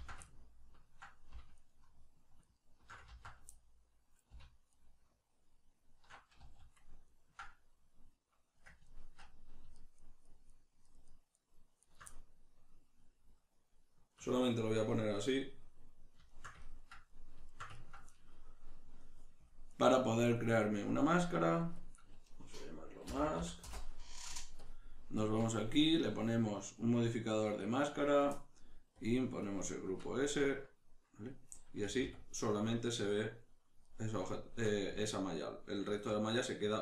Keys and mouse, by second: 0.2-1.5 ctrl+middle drag, 1.5 alt+shift+right click, 2.4 alt+shift+right click, 3.1 ctrl+z, 3.5-4.7 middle drag, 4.7 alt+shift+right click, 6.4 z, 7.1-9.8 ctrl+middle drag, 9.8 shift+right click, 10.0 shift+right click, 10.2 shift+right click, 10.5 shift+right click, 10.8 shift+right click, 11.1 shift+right click, 11.4 shift+right click, 11.8 shift+right click, 12.1-19.4 middle drag, 19.4 click, 20.2 middle click, 21.0-31.5 drag, 23.7 Return, 30.4 Tab, 31.5-36.8 middle drag, 31.8 a, 34.9 z.